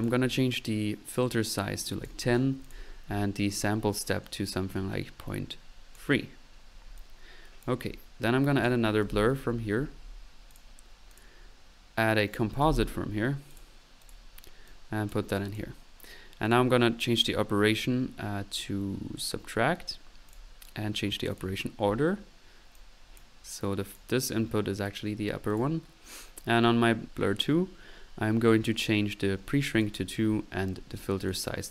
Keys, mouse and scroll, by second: 1.9 click, 2.7 click, 6.0-6.4 drag, 7.9-8.4 middle drag, 8.6 right click, 8.6 click, 9.1-9.4 typing, 10.5-11.8 drag, 12.3 right click, 12.7 c, 13.5 click, 14.9-15.3 drag, 14.9 typing, 16.1 typing, 20.5 drag, 21.3 click, 21.4 typing, 23.2 drag, 24.0 click, 25.5 click, 29.8-30.2 middle drag.